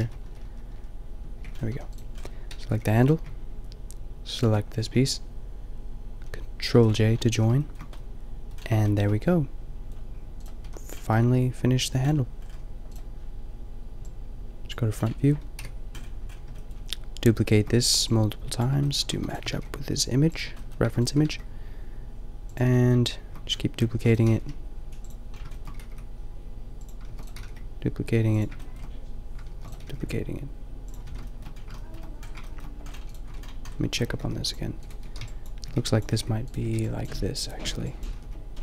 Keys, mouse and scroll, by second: 0.0 ctrl+z, 0.2 ctrl+z, 0.4 ctrl+z, 0.8 ctrl+z, 1.7 a, 1.9-3.9 drag, 2.7 g, 6.7 ctrl+j, 7.4 a, 10.4-12.6 middle drag, 10.6 a, 15.1 click, 15.5 KP_5, 18.8 drag, 19.1 shift+d, 19.4 g, 20.9 shift+d, 21.2 g, 24.0 shift+d, 24.3 g, 25.8 g, 27.1 shift+d, 27.3 g, 29.6 shift+d, 29.9 g, 31.1 a, 33.3 Tab, 33.8 a, 34.2 ctrl+r, 34.8-38.2 typing.